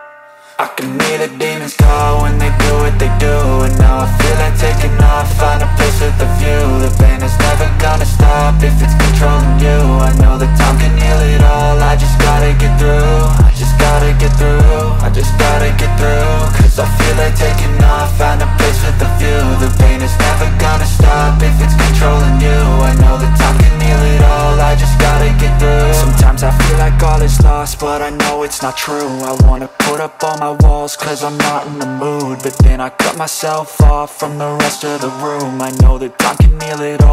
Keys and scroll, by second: 4.3 ctrl+r, 7.2 ctrl+r, 31.9 ctrl+z, 36.4 space.